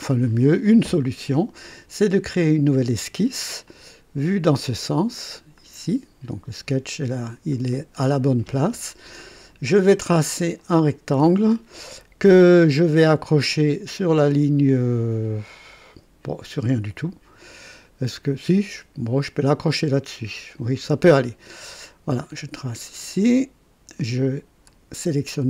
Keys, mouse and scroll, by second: 2.4 click, 3.7 click, 5.5 click, 7.2-7.5 scroll up 1, 7.7 right click, 10.5 click, 20.5 click, 22.1 click, 22.9 right click, 24.6 click.